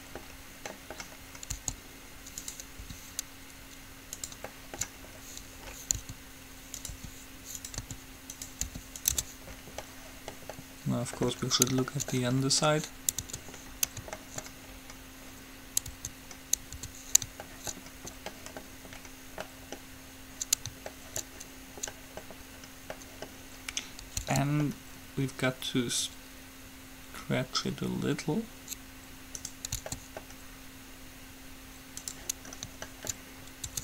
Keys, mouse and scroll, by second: 1.7 s, 3.0 r, 6.2 s, 7.2 r, 8.0 s, 8.8 r, 9.4 Tab, 9.7 middle click, 13.4 Tab, 16.2 Tab, 17.0 Tab, 24.4 s, 29.9 s, 32.6-33.8 middle drag.